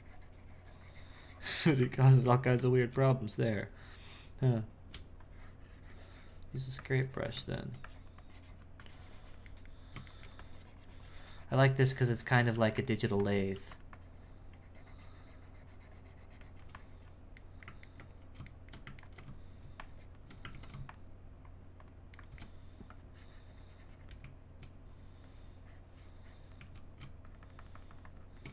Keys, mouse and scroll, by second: 1.9 ctrl+z, 2.4 shift+middle click, 2.9 space, 5.2-9.5 drag, 9.5 middle click, 10.4-12.5 drag, 12.5 f, 13.0 f, 13.9-17.4 drag, 17.4-19.8 middle drag, 19.8 shift+click, 20.5 ctrl+z, 20.9-22.2 shift+drag, 22.2 shift+middle click, 22.9-24.2 drag, 24.2 z, 25.3-26.6 drag, 26.6 z, 27.3-28.5 shift+drag.